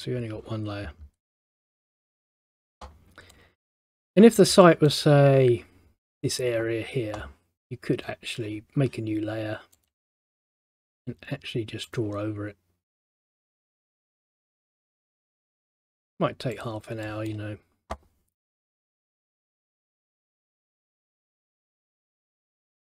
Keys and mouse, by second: 2.1 middle click, 3.4 middle click, 4.7 middle click, 9.9 click, 12.0 click, 13.7 click, 17.2 middle click, 19.3 click, 20.8 click, 21.3 middle click, 22.5 click.